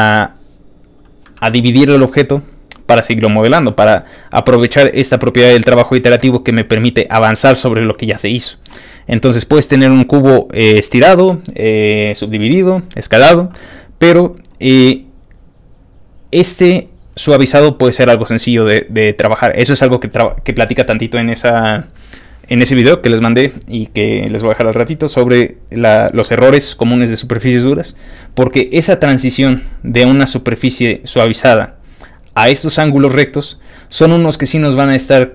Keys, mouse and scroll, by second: 1.4 ctrl+w, 1.9 middle click, 2.0-4.2 scroll down 7, 2.4 middle click, 4.2 scroll up 2, 4.7-5.5 scroll down 5, 5.9 click, 6.7 click, 7.1 click, 8.2 scroll down 2.